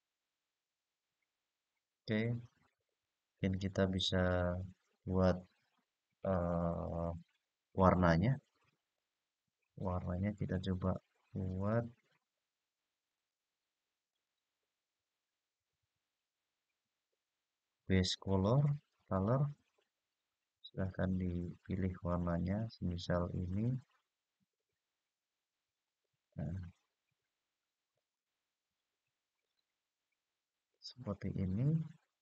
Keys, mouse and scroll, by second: 2.6 click, 3.7 click, 8.7 click, 11.1-11.7 scroll down 2, 11.7-12.8 scroll down 3, 12.8 click, 13.8 click, 18.2-20.2 drag, 20.8 click, 27.7 click, 29.4 click, 31.0-32.0 scroll up 3, 32.0-32.2 scroll down 1.